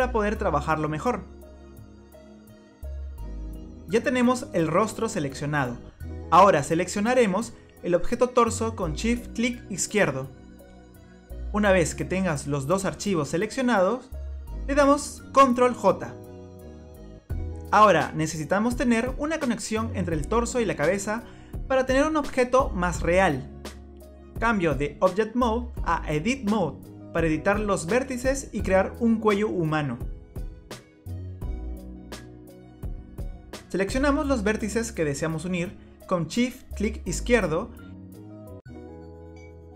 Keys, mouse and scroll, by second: 0.9 scroll up 1, 9.8 shift+click, 15.7 ctrl+j, 17.8 click, 18.9 click, 21.9 scroll down 1, 23.0 scroll down 4, 24.3-24.9 scroll up 1, 24.9 scroll down 1, 27.1 click, 30.9 middle click, 32.8-33.1 scroll up 2, 33.9-34.4 scroll up 1, 34.5 click, 37.4 shift+click.